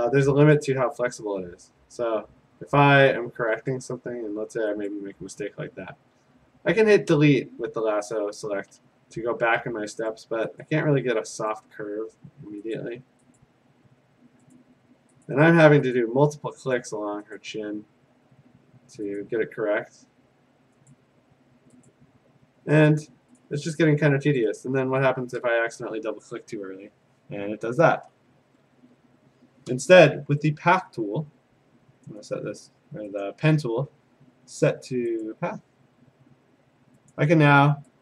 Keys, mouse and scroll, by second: 0.6 BackSpace, 1.2 BackSpace, 3.7 click, 4.9 click, 7.1 BackSpace, 8.8 BackSpace, 10.1 click, 10.6 click, 11.5 click, 12.8 click, 13.4 click, 14.6 click, 15.3 click, 16.0 click, 16.8 click, 17.5 click, 19.2 click, 20.9 click, 21.9 click, 22.9 click, 23.4 click, 24.4 click, 24.6 click, 28.7 ctrl+d, 28.7 click, 32.1 click, 32.3 click, 33.3 click, 34.9 click, 35.7 click, 37.1 click.